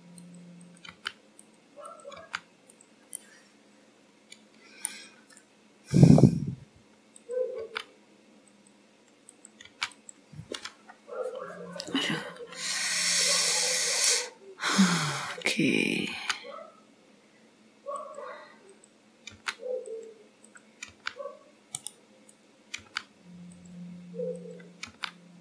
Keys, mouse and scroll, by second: 0.6 click, 0.9 g, 1.9 click, 2.3 g, 3.1 middle click, 5.2-5.9 scroll up 2, 7.2 click, 7.8 g, 9.4 click, 9.7 g, 10.5-10.8 scroll down 4, 12.3 scroll up 3, 13.5 middle click, 14.5-15.0 scroll down 1, 15.8 click, 16.3 g, 18.8 click, 19.4 g, 20.5 click, 20.9 g, 22.4 click, 23.0 g, 24.4 click, 25.0 g.